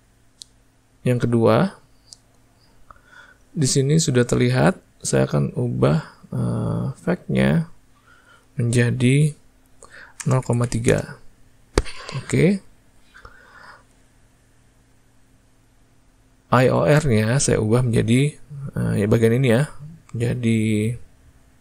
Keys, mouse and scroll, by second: 1.1-21.6 drag.